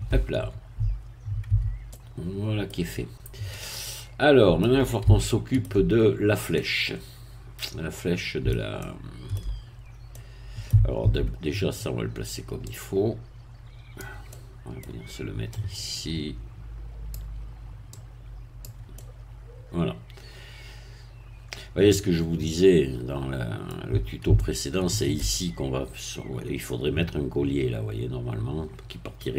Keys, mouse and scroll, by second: 1.5 Tab, 1.9 middle click, 3.0-3.3 scroll down 1, 3.5-5.0 middle drag, 5.2 shift+middle click, 6.1 shift+scroll up 1, 6.5-8.6 middle drag, 8.8 shift+middle click, 9.8-10.1 shift+scroll up 1, 10.1 middle click, 11.0 Tab, 12.7-14.2 drag, 14.2 middle click, 15.6-17.3 drag, 17.9 click, 18.9-24.2 middle drag, 24.4-25.6 shift+middle drag.